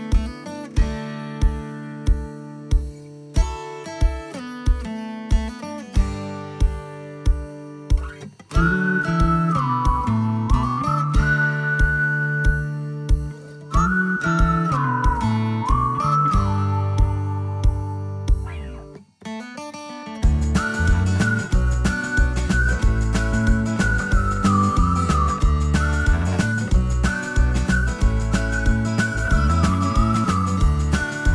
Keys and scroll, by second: 14.1 space, 16.9 Delete, 18.0 Delete, 18.8 Delete, 21.4 Delete, 21.9 Delete, 23.1 Delete, 23.6 Delete, 25.0 Delete, 25.5 Delete, 27.7 Delete, 29.1 Delete, 30.7 ctrl+z.